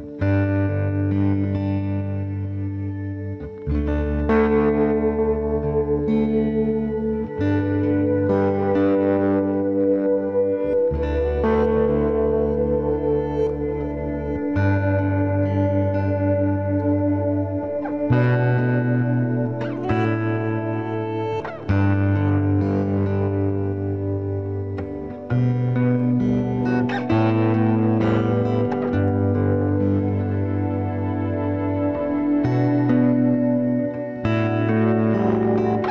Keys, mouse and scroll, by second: 1.8 Tab, 2.8-4.0 middle drag, 4.0-8.0 right drag, 13.7 ctrl+a, 13.7 ctrl+z, 14.8 g, 16.0-17.9 middle drag, 16.6 ctrl+Tab, 17.9-19.7 right drag, 18.2 c, 19.7 c, 28.5-30.2 right drag, 30.2-32.1 middle drag, 30.3 click, 30.6 c, 34.1 right click, 34.5-35.9 right drag.